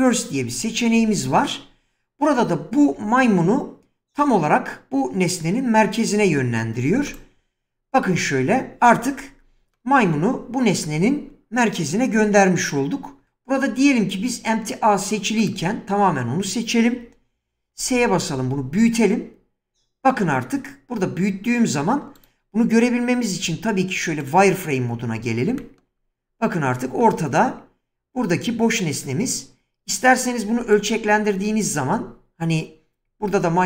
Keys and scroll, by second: 17.6 s, 23.5 z.